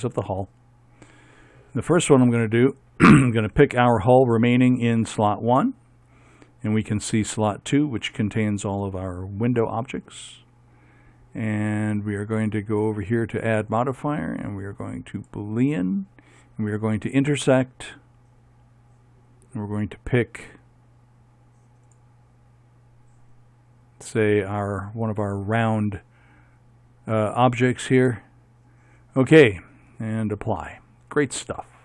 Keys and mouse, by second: 2.8-6.0 right drag, 14.0-15.4 drag, 23.2-24.3 drag, 28.6-31.0 middle drag, 31.0-31.8 drag.